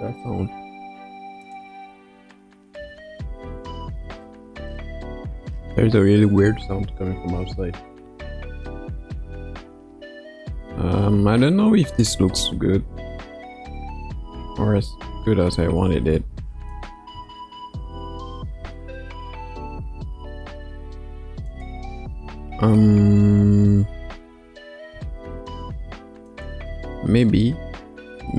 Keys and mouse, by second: 1.5-4.1 drag, 7.3 space, 10.5 space, 12.3 space, 15.7 space, 16.7 click, 17.1 space, 20.4 space, 21.4 click, 21.8 space, 24.9 space, 26.4 click, 26.7 space.